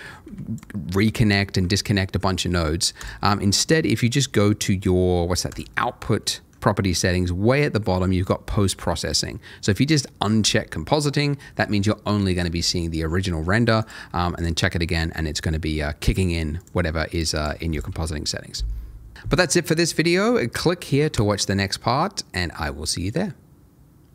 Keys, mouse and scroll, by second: 0.2 Escape, 2.9 click, 6.2 middle click, 10.4 click, 13.8 click, 17.3 double click.